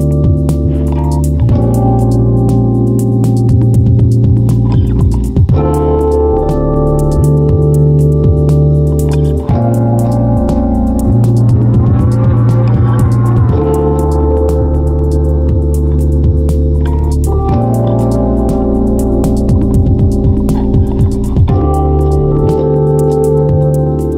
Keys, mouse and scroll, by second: 3.5 m, 10.8 m, 14.8 Left, 15.0 Left, 15.4 Left.